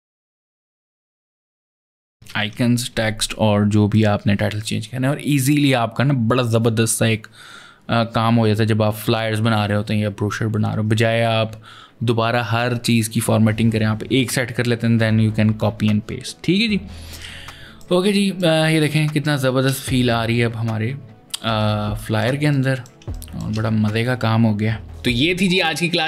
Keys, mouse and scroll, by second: 0.3-1.9 typing, 1.0 click, 2.2 ctrl+Return, 3.7 click, 17.2 ctrl+space, 17.2 ctrl+click, 18.2 space, 18.7 ctrl+click.